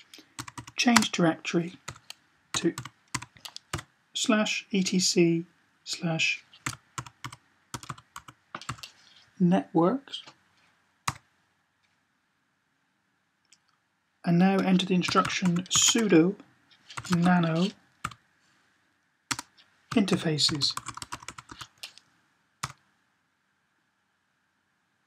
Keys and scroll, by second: 0.2 typing, 1.8-3.5 typing, 6.2-8.5 typing, 14.8-15.5 typing, 16.7-17.8 typing, 19.6-21.4 typing.